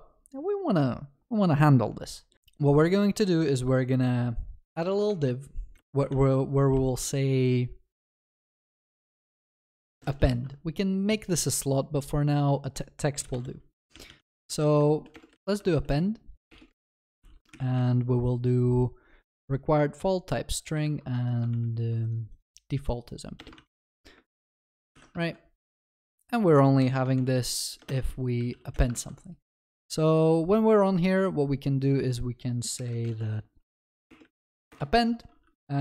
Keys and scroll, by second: 5.1 Tab, 6.2 ctrl+s, 10.3 ctrl+s, 17.3 ctrl+s, 21.5 ctrl+v, 24.9 ctrl+y, 25.2 ctrl+s, 34.7 Return.